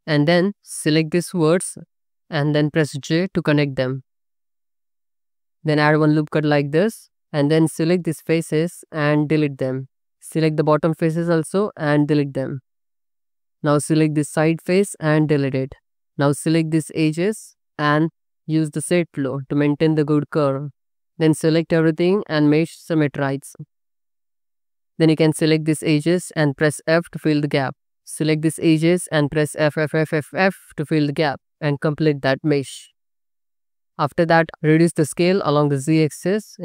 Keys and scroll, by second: 0.3 1, 3.1 j, 5.9 ctrl+r, 7.3 3, 8.9 x, 11.2 x, 12.8 2, 14.9 x, 16.3 2, 21.3 a, 23.5 2, 24.7 2, 27.2 f, 29.1 f, 34.0 s, 34.4 z.